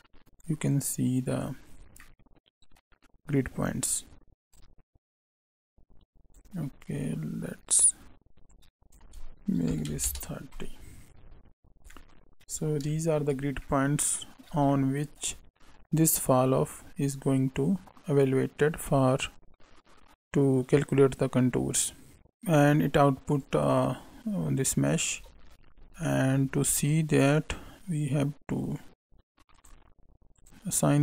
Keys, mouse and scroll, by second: 0.6 click, 1.7 scroll down 3, 1.9 middle click, 4.5 click, 7.7 click, 8.5 click, 11.1 scroll up 2, 11.9 middle click, 12.5 scroll up 2, 12.9 shift+middle click, 13.3 scroll down 1, 13.6 middle click, 14.6 shift+middle click, 23.4 click, 25.7 scroll down 2, 26.0 middle click, 26.7 shift+a, 30.4 click, 30.4 scroll up 3, 30.7 click.